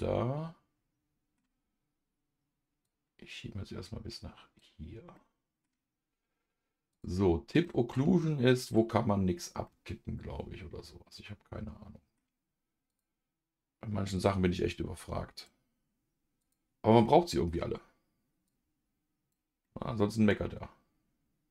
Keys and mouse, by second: 2.8 click, 3.3-5.1 drag, 5.1 middle click, 6.9 click, 7.6 middle click, 8.6-9.6 drag, 9.6-12.1 middle drag, 12.9 click, 14.1-15.6 drag, 16.4 click, 17.0 middle click, 18.4 click, 19.6-21.5 middle drag.